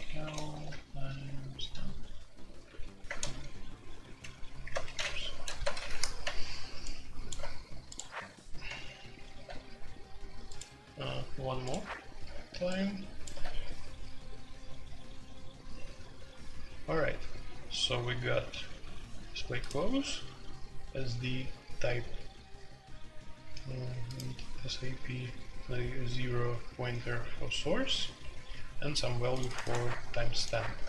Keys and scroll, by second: 0.0-6.3 typing.